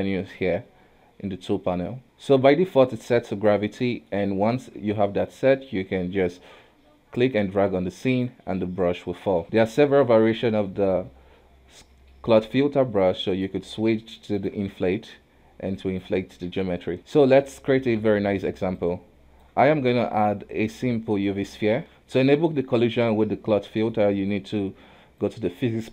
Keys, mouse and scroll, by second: 2.5-3.6 scroll down 1, 3.6-6.3 middle drag, 6.3 click, 8.5-9.4 scroll down 3, 9.4 shift+middle click, 9.4 ctrl+z, 10.2-10.7 scroll up 1, 10.7-13.3 middle drag, 13.3-15.0 drag, 16.5 ctrl+z, 17.0 ctrl+Tab, 17.0-18.7 middle drag, 18.7-19.9 drag, 19.9 shift+a, 21.6 scroll up 1, 21.8-25.2 shift+middle drag, 25.2 click.